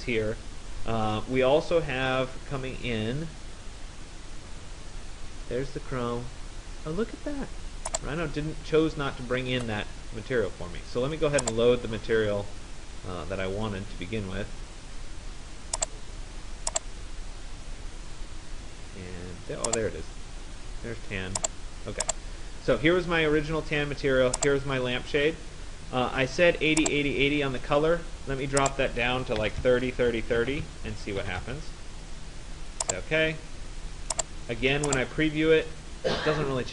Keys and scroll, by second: 29.0-32.0 typing, 30.2 Tab, 31.0 Tab.